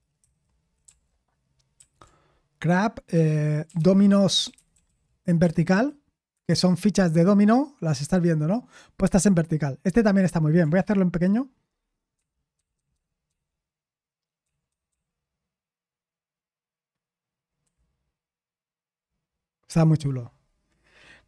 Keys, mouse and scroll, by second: 0.2 ctrl+c, 0.8 ctrl+p, 4.7 ctrl+w, 6.0-6.8 typing, 12.7 ctrl+_, 12.9 ctrl+_, 17.6 ctrl+*.